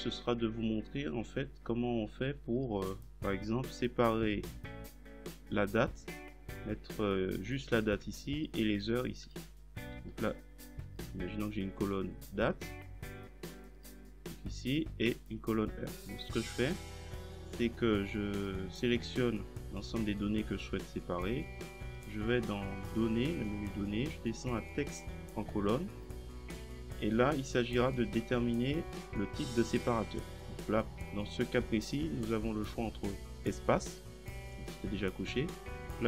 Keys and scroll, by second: 10.0 ctrl+v.